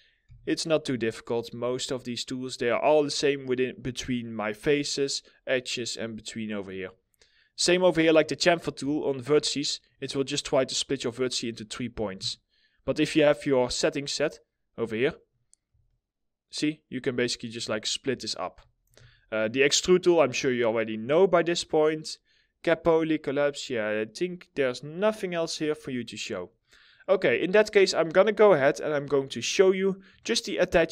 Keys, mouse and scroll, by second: 6.2 middle click, 6.5-8.3 scroll up 1, 8.5 alt+middle click, 11.8 alt+middle click, 14.8 right click, 15.4 alt+middle click, 17.8 alt+middle click, 18.5 ctrl+z, 26.1 middle click, 29.1 middle click, 29.4 scroll down 1, 29.8 alt+middle click, 30.6 middle click.